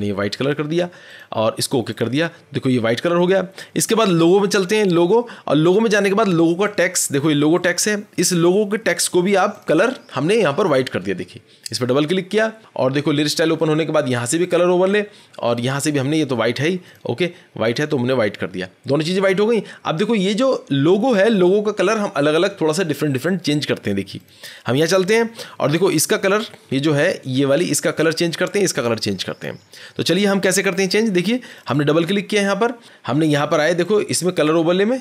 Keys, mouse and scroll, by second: 0.4 click, 1.1 click, 1.9 click, 4.9 click, 6.7 click, 7.5 click, 9.5 click, 9.6 click, 14.4 click, 15.4 click, 16.9 click, 17.7 click, 24.2 click, 25.0 scroll, 26.2 click, 31.5 click, 31.6 click.